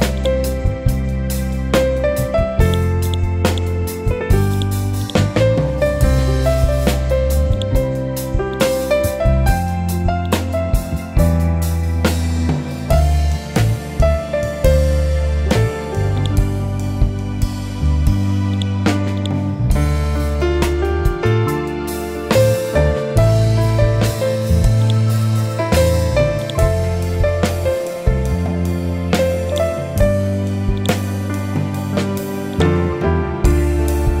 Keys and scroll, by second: 1.6 ctrl+u.